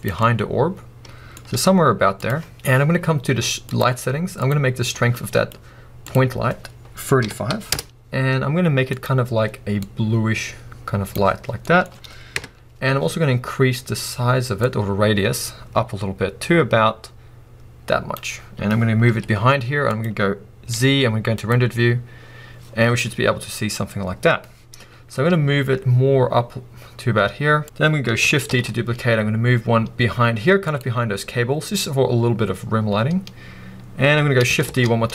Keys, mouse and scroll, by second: 1.5 g, 25.3 g.